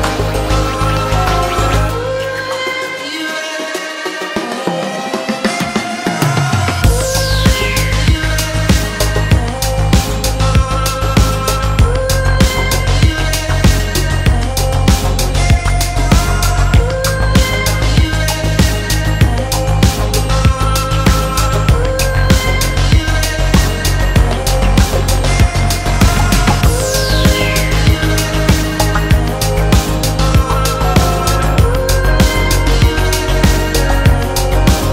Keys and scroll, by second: 24.0 super+-, 27.9-28.7 typing, 32.0 b, 32.4 super++.